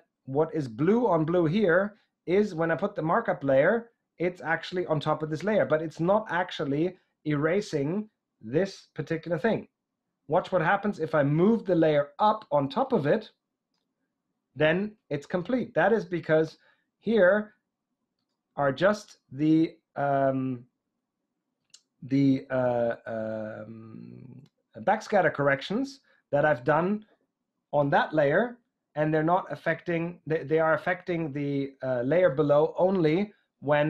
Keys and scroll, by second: 27.8 j.